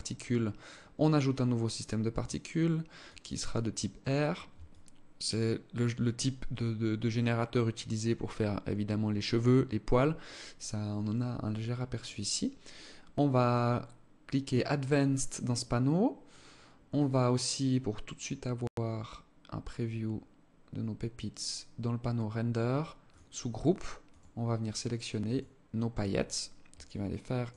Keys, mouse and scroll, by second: 1.7 click, 4.3 alt+click, 13.0 click, 16.7-18.5 scroll down 14, 19.0-19.7 scroll down 5, 22.5 click, 23.5 click, 26.3 alt+click, 27.3 alt+click.